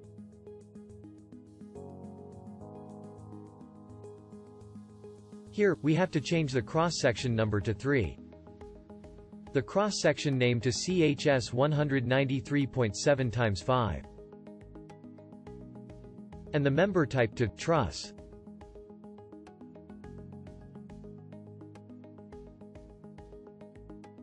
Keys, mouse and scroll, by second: 0.8-2.6 alt+drag.